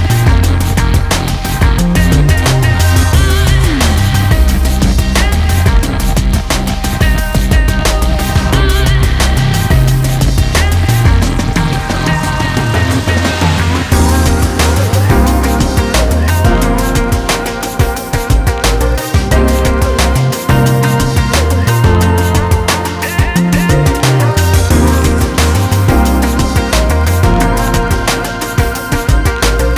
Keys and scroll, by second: 18.1 ctrl+space.